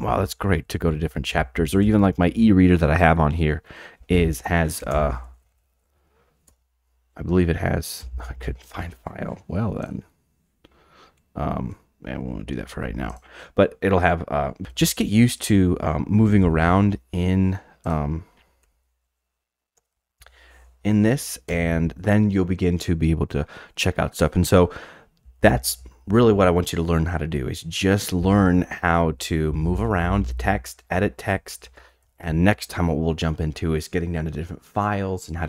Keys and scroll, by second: 0.0-1.3 typing, 5.0 alt+space, 5.0-6.0 typing, 6.4 Return, 8.0 j, 13.0 alt+F4, 14.6-15.5 typing, 16.4 alt+super+Down, 18.6 alt+super+Down, 20.8-22.0 typing, 25.0-26.2 typing, 27.9-32.0 typing.